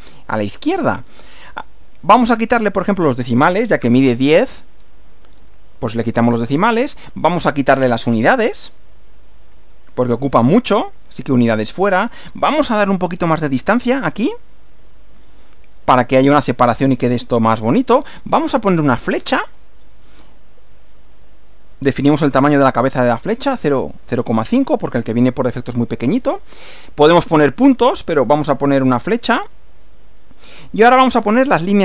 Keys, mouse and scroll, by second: 0.2-1.2 drag, 3.2 click, 4.8 scroll down 1, 5.4 scroll down 1, 7.2-8.0 drag, 9.2 click, 9.6 click, 10.7 click, 12.3 click, 14.2 1, 14.6 m, 18.9-19.7 drag, 20.8 click, 22.5-23.6 typing, 24.7 click, 28.3 click, 29.7 click.